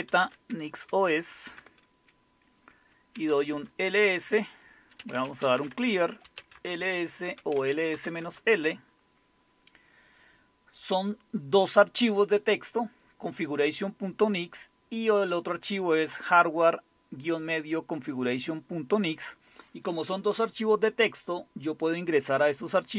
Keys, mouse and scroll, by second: 0.0-1.4 typing, 1.5 Return, 2.9-3.6 typing, 4.8-8.4 typing, 18.9 click, 19.7 click.